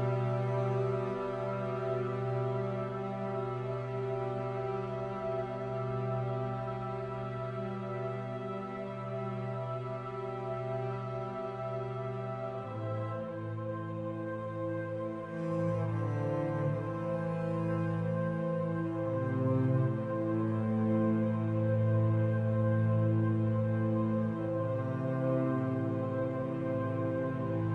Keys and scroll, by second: 2.5 ctrl+0, 19.2 ctrl+alt+z, 23.1 ctrl+z.